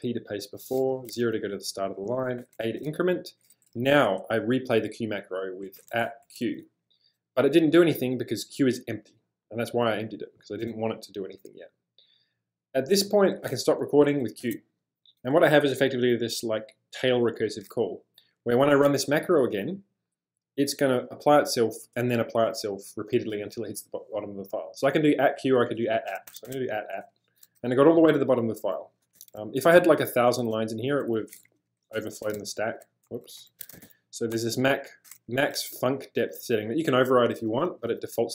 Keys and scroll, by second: 0.9 0, 2.5 ctrl+a, 5.5-6.7 typing, 14.4 q, 26.3 shift+2, 26.5 shift+2, 29.1 space, 30.3-34.3 typing, 36.4-37.9 typing.